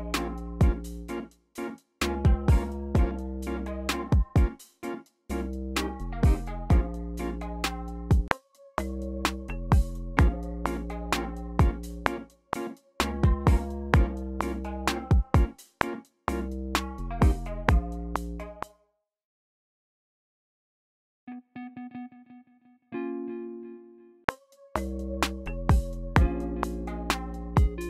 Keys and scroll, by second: 8.1 typing, 18.1-19.5 typing, 24.2 r.